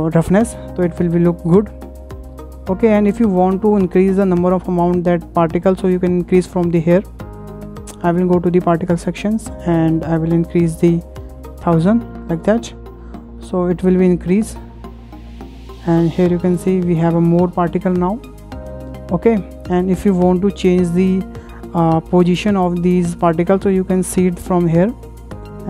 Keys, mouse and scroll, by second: 0.7 scroll up 1, 0.8-2.2 shift+middle drag, 2.2 scroll up 1, 2.3-4.9 middle drag, 4.9 drag, 6.9 click, 7.9 click, 9.4-11.5 drag, 10.9 KP_1, 11.2 KP_0, 11.5 KP_0, 12.0 Return, 13.3 click, 13.7 scroll down 2, 14.2-15.6 middle drag, 15.6-16.0 scroll up 2, 16.0-18.3 shift+middle drag, 18.3 scroll down 2, 18.9-22.6 middle drag, 22.6 click, 25.1-25.6 drag.